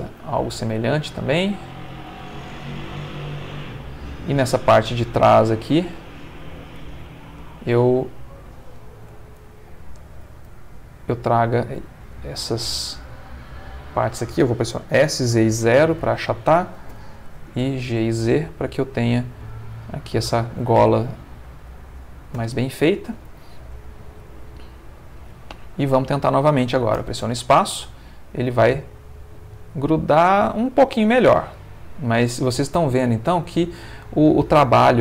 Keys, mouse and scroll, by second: 0.6 g, 1.9 click, 2.4 middle click, 3.2-5.0 middle drag, 5.5 click, 6.0 z, 6.8 click, 7.7 shift+click, 8.1 shift+click, 8.6 shift+click, 9.3 shift+click, 10.5 g, 11.3 Escape, 12.1 click, 12.6 shift+click, 13.3 shift+click, 14.9 s, 15.2 z, 15.6 0, 16.0 click, 16.9 g, 17.2 z, 19.0 click, 19.4-20.7 middle drag, 21.0-22.5 ctrl+middle drag, 22.4 Tab, 22.9-24.6 ctrl+middle drag, 24.7-26.8 middle drag, 27.0 space, 28.7-30.5 middle drag, 30.8-32.3 ctrl+middle drag, 32.5-33.6 ctrl+middle drag.